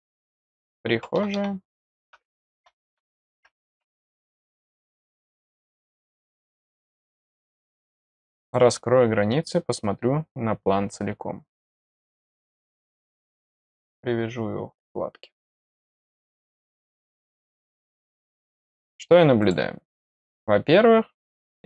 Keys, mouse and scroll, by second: 8.4 click, 11.2 scroll down 1, 12.4 click, 12.5-13.1 scroll, 13.6-14.8 drag, 15.3 click, 18.0 scroll up 1, 18.3 middle click, 19.3 click, 19.9 click, 20.1 click.